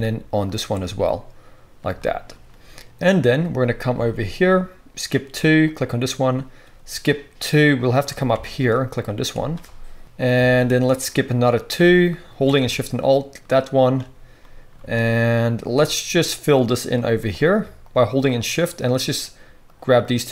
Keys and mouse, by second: 0.4 alt+shift+click, 0.4 alt+shift+middle click, 4.0 shift+click, 4.2 middle click, 4.3-8.6 shift+drag, 8.6 alt+shift+middle click, 8.7 alt+shift+click, 9.5 middle click, 10.3-11.7 shift+drag, 11.7 alt+shift+middle click, 12.1 alt+shift+click, 12.4 right click, 12.5-13.9 shift+drag, 13.9 right click, 14.1 middle click, 14.3 right click, 14.7 shift+click, 14.8 shift+middle click, 15.2 right click, 15.7 middle click, 16.0 right click, 16.8 shift+click, 16.8-17.8 right drag, 17.1 z, 17.8-20.3 middle drag.